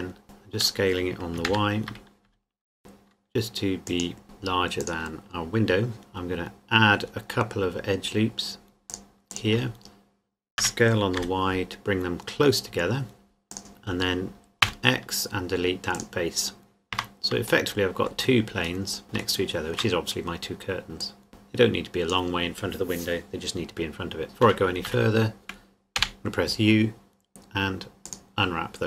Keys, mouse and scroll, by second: 0.2 s, 0.6 click, 1.5 ctrl+KP_3, 2.2 x, 2.8 g, 3.9 click, 4.2 s, 4.8 click, 5.9-6.8 scroll up 2, 6.8 scroll down 1, 7.1-7.6 scroll up 1, 7.7-8.9 scroll down 1, 8.9 click, 10.6 s, 11.2 y, 13.5 click, 14.6 x, 15.9 click, 16.9 Tab, 17.7 middle click, 18.0 z, 19.1 shift+middle click, 20.1-21.0 scroll up 2, 21.0 scroll up 1, 21.0 click, 24.4 Tab, 24.9 a, 25.9 u, 28.1 click.